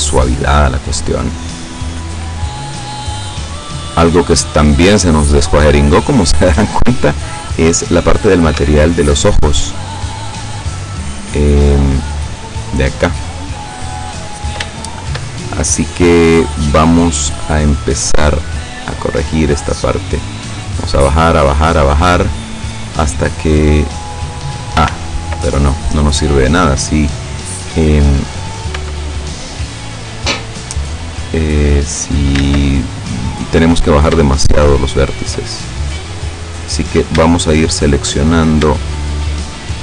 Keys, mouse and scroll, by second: 0.0-1.1 drag, 3.2 scroll down 2, 4.1-4.7 scroll up 4, 7.8 right click, 8.6 Tab, 9.8 right click, 10.5-12.3 middle drag, 13.9-14.3 scroll up 1, 14.3-14.6 scroll down 1, 14.8 shift+middle click, 16.1 scroll down 1, 16.3-16.7 scroll up 1, 16.9-18.0 middle drag, 18.6-22.7 drag, 23.3-23.6 scroll down 1, 23.7-25.0 middle drag, 24.9 ctrl+z, 25.5-26.5 ctrl+middle drag, 26.7-27.1 scroll up 2, 28.8 l, 31.0-32.5 drag, 32.5 ctrl+z, 33.3 right click, 34.6 shift+right click, 35.6-36.9 shift+middle drag, 37.2 shift+scroll up 1, 37.3 shift+middle click, 39.0 shift+right click.